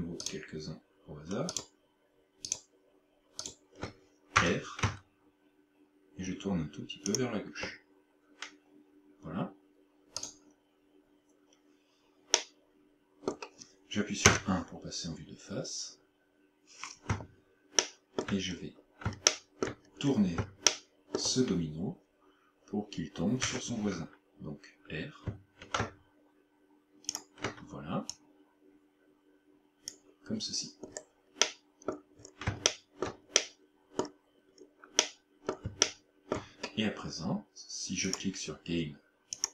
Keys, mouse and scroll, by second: 0.3 shift+right click, 1.5 shift+right click, 2.5 shift+right click, 3.5 shift+right click, 4.4 r, 7.2 shift+click, 10.3 right click, 12.4 middle click, 14.3 KP_1, 17.9 shift+middle click, 18.6-19.3 scroll up 2, 19.3 shift+middle click, 19.3 scroll up 2, 19.9-20.3 scroll up 2, 20.8 shift+middle click, 23.5 r, 27.2 ctrl+click, 28.1 click, 30.5-31.5 scroll down 7, 31.5 middle click, 32.2 scroll down 1, 32.7 shift+middle click, 33.4 middle click, 34.5 scroll up 2, 35.1 middle click, 35.9 shift+middle click, 38.1 click.